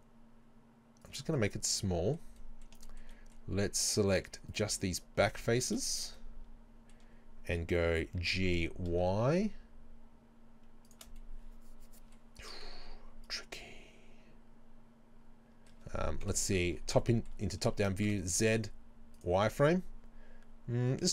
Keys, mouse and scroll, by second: 1.1 shift+click, 1.4-4.2 middle drag, 4.2 right click, 4.5 shift+right click, 4.8 shift+right click, 5.6 ctrl+z, 5.9 shift+right click, 6.2-11.0 middle drag, 8.2 g, 11.0 shift+click, 11.2-16.8 middle drag, 12.8 z, 16.3 KP_7, 17.0-18.1 shift+middle drag, 18.1 z, 19.5-21.0 scroll up 2, 21.0 scroll down 2.